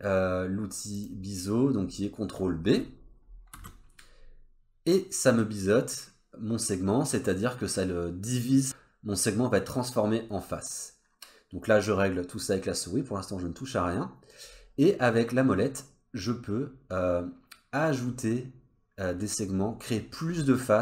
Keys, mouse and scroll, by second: 0.9 click, 3.5 ctrl+b.